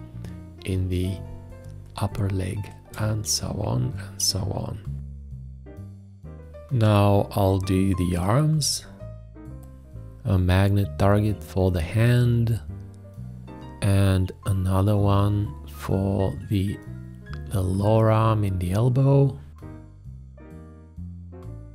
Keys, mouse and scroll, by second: 4.0 space, 8.8 shift+`, 16.2 shift+`, 18.3 click, 21.0 space.